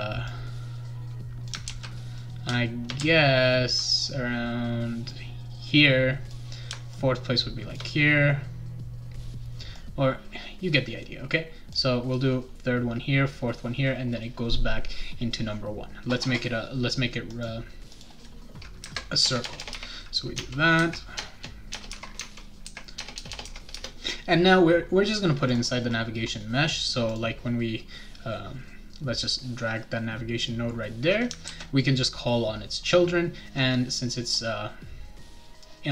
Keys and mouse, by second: 0.3-1.5 drag, 1.7 ctrl+z, 2.2-3.7 shift+right drag, 3.0 a, 5.1-6.3 drag, 6.9 shift+click, 9.7-11.7 drag, 17.3 click, 17.9 click, 19.2 BackSpace, 19.4 BackSpace, 19.6 BackSpace, 19.7 2, 20.3 Tab, 21.2 BackSpace, 21.7 BackSpace, 21.9 3, 22.1 Tab, 22.9 BackSpace, 23.1 BackSpace, 23.3 BackSpace, 23.4 4, 23.7 Return, 25.5 click, 27.1 click, 29.2-30.4 drag, 31.4 ctrl+s.